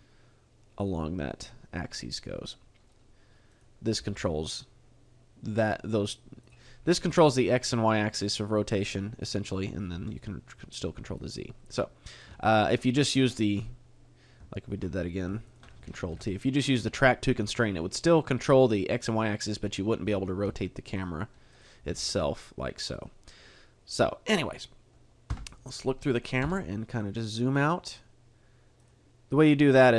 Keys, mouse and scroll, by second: 0.8 right click, 1.5 middle click, 2.3 middle click, 3.5 right click, 3.9 g, 6.5 right click, 6.6 middle click, 7.1 g, 8.3 right click, 8.8 middle click, 9.4 right click, 10.3 r, 11.3 right click, 11.6 middle click, 12.4 shift+middle click, 14.9 middle click, 15.5 shift+right click, 16.1 ctrl+t, 20.5 r, 21.0 right click, 21.5 right click, 21.9 r, 23.0 right click, 23.4 middle click, 25.3 KP_0, 26.4 g, 28.9 right click.